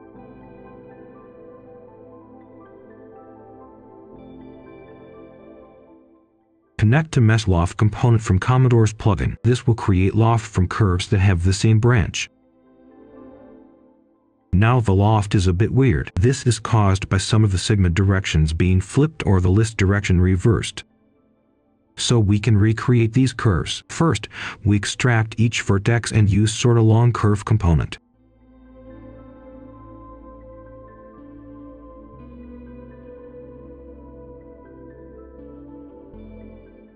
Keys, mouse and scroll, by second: 1.0 ctrl+shift+d, 1.5 ctrl+shift+h, 2.3 ctrl+right click, 3.0 click, 3.9 Delete, 4.6 click, 5.0-7.0 typing, 7.6 click, 10.2 middle click, 10.8 click, 11.4 ctrl+right click, 13.1 shift+right click, 14.5-18.1 drag, 19.0 alt+click, 20.7-23.4 typing, 24.1 click, 24.6-27.2 typing, 27.3 Return, 28.6-29.8 drag, 30.0 ctrl+right click, 31.2 click, 32.4-35.1 typing, 36.0 click.